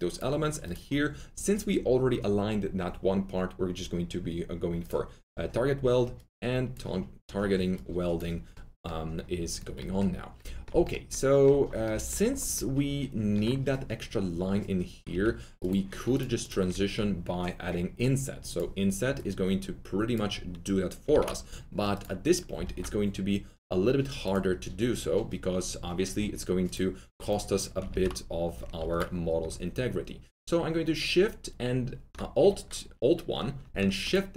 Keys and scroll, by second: 15.0 4, 21.1 ctrl+z, 22.5 ctrl+z, 22.6 alt+1, 27.8 ctrl+z, 28.8 alt+1.